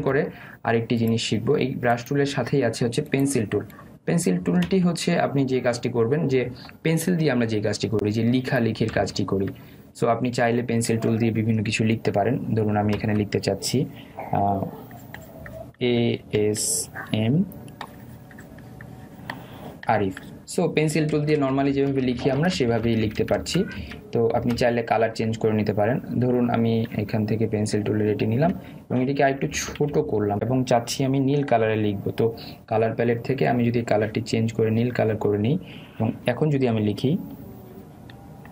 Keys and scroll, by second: 8.3 Delete, 10.0 ctrl+z, 22.1 ctrl+alt+z, 30.9 [, 32.5 ].